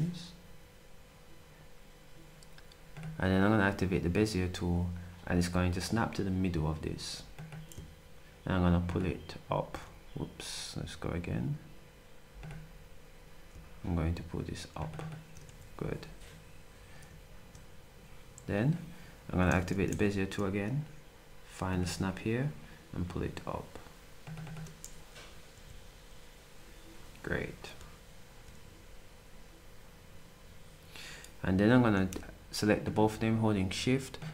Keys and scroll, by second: 19.9 b, 25.5 s.